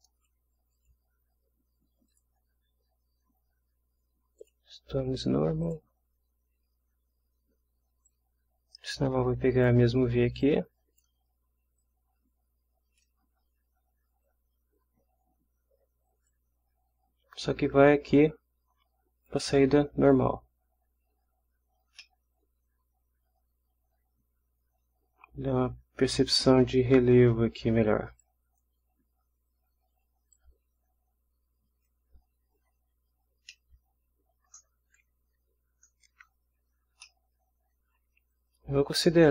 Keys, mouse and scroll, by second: 0.7 click, 2.1 click, 4.4 click, 5.6 click, 8.0-9.8 drag, 10.4-11.2 drag, 11.8-13.2 drag, 16.3-19.5 drag, 22.0 scroll up 1, 22.2-26.0 scroll down 1, 26.0 scroll up 1, 28.2-28.8 drag, 28.8-30.3 middle drag, 30.3-32.0 drag, 32.8 scroll down 1, 33.5-34.1 middle drag, 34.1-34.7 scroll down 2, 36.6 scroll up 2, 37.0-37.8 ctrl+middle drag, 37.8 ctrl+scroll down 1, 38.0-38.7 ctrl+scroll up 1, 38.7 scroll up 1.